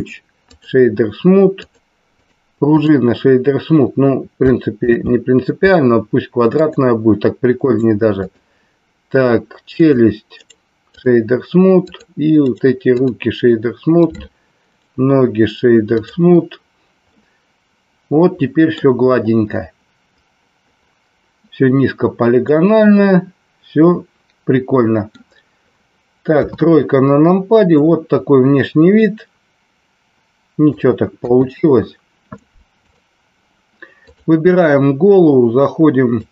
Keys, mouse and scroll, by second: 0.0 right click, 2.1 right click, 4.9 ctrl+z, 6.6 click, 7.5 right click, 9.7 click, 10.5 right click, 11.9 click, 12.4 right click, 14.7-16.0 right drag, 17.1-18.7 middle drag, 22.6-25.1 middle drag, 26.2 KP_3, 29.0-30.7 middle drag, 31.2 KP_1, 32.7 click, 34.0 click.